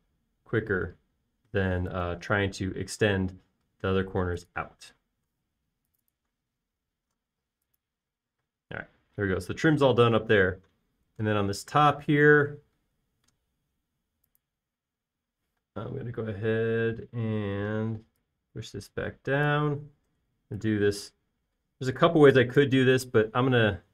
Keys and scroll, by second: 0.8 1, 0.9 Return, 6.9-7.9 typing, 9.8 space, 14.6 e, 17.0 typing, 21.7 f.